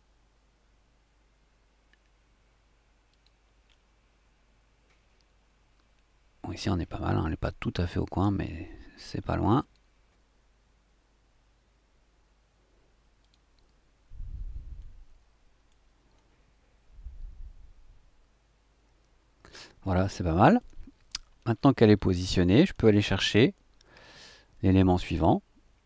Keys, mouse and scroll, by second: 3.1 click, 3.7 middle click, 3.7 scroll up 2, 9.6 click, 13.2 click, 14.7-15.8 drag, 15.8 middle click, 16.1-20.8 drag, 21.5-23.4 ctrl+scroll down 6, 24.0-25.3 drag, 25.3 middle click.